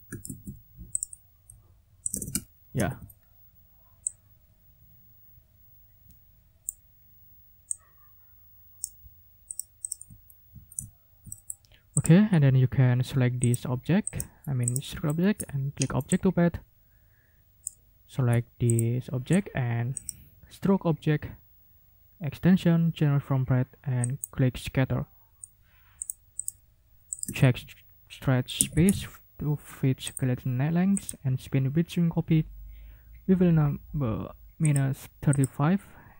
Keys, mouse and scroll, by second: 0.2 ctrl+z, 0.9 click, 2.0 click, 2.3 ctrl+a, 8.8 click, 9.5 click, 9.8 click, 10.2 ctrl+scroll down 2, 10.9 ctrl+scroll down 2, 11.2 ctrl+click, 11.9 click, 13.4 click, 14.0 click, 14.6 scroll up 1, 15.0 click, 15.4-15.8 ctrl+scroll up 3, 16.1-17.8 ctrl+drag, 18.7 shift+click, 19.9 click, 24.0 click, 26.0 click, 26.4 click, 27.1 ctrl+click, 27.4 ctrl+a, 28.5-29.3 typing, 30.0 click, 30.9 click, 34.6 click, 35.3 click.